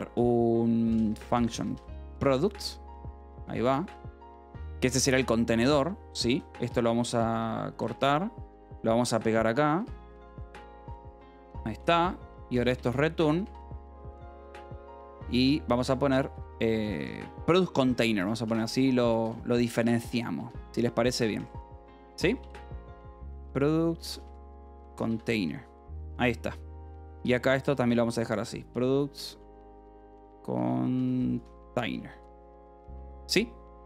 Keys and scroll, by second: 0.1-3.5 typing, 4.0 Return, 4.3 Escape, 4.6-7.1 typing, 7.7 Escape, 8.3-20.5 typing, 20.3 Escape, 21.6-26.1 typing, 27.2 k, 27.7 h, 28.8-33.8 typing.